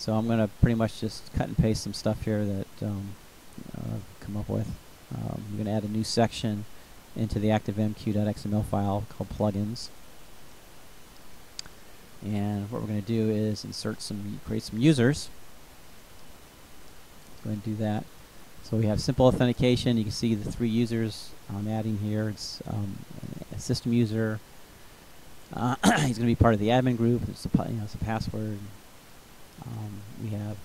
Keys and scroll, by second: 2.6 ctrl+c, 3.7 ctrl+v, 6.6 ctrl+c, 8.2 ctrl+v, 10.0 Return, 12.0 Return, 15.7 ctrl+c, 16.9 ctrl+v, 19.4 Delete, 20.3 Down.